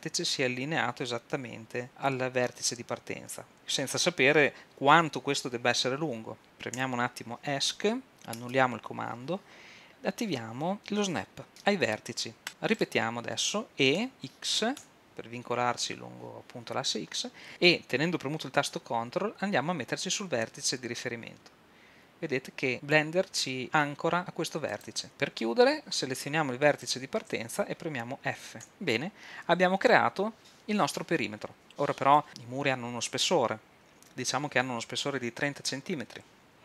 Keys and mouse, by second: 8.4 super+z, 14.0 e, 28.6 f.